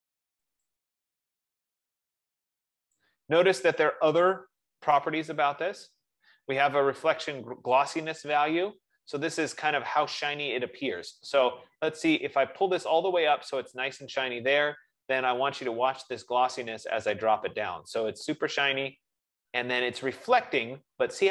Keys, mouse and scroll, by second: 2.4 F15, 3.1 click, 13.6 click, 18.5 click, 21.1-21.3 drag.